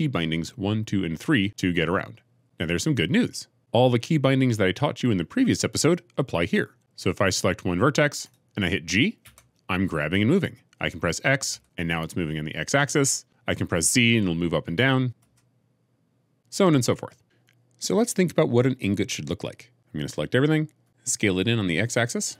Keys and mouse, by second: 1.4 2, 1.4 3, 1.4 1, 9.1 g, 11.4 x, 15.1 z, 16.4 Escape, 20.7 a, 20.8 Escape, 22.2 s.